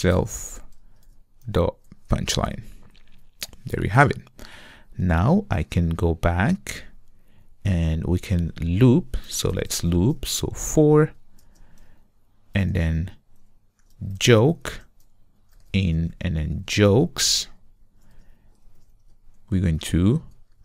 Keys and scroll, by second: 1.1 Return, 2.5 Return, 10.7 Return.